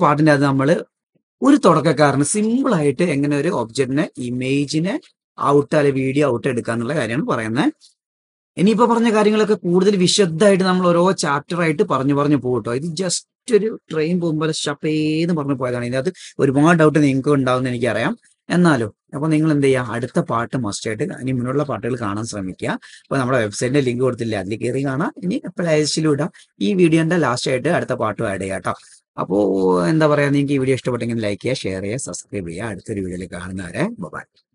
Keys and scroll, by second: 5.3 d, 7.8 typing, 9.7 super+z.